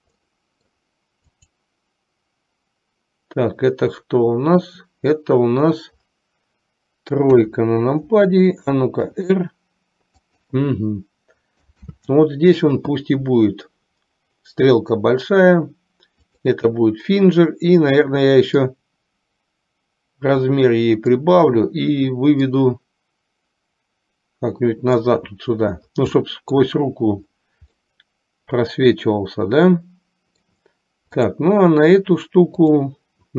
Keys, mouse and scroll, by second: 0.3-0.9 middle drag, 1.3 click, 7.3 KP_3, 9.2 r, 11.9 ctrl+z, 16.7 click, 19.2-21.2 drag, 22.4-25.1 drag, 26.4-26.8 middle drag, 27.9-30.7 middle drag, 31.2 click, 32.7 click.